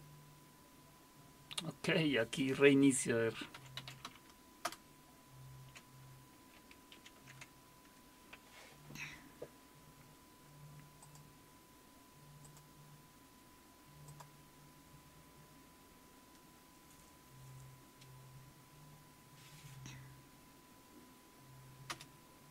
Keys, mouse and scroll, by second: 3.3-4.5 typing, 4.6 Return, 7.0 alt+super+q, 11.0 click, 12.4 click, 14.1 click, 21.9 Return.